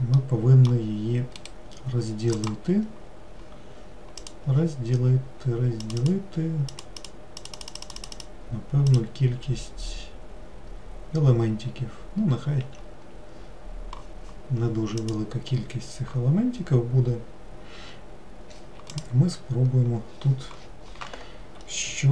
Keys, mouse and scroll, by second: 0.3-2.6 middle drag, 2.6-6.1 right drag, 6.1-22.1 drag.